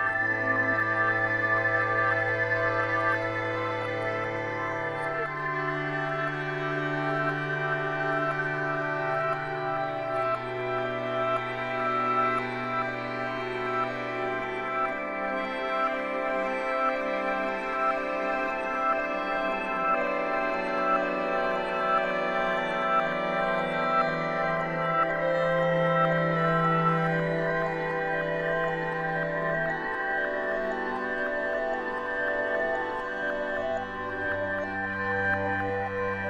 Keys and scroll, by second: 4.9 ctrl+z, 9.3 ctrl+z, 9.8 ctrl+z.